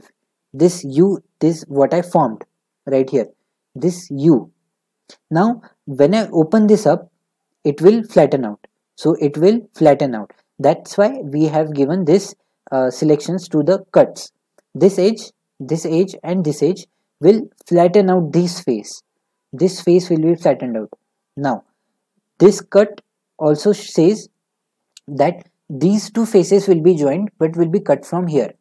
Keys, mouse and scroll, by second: 21.7-24.8 middle drag.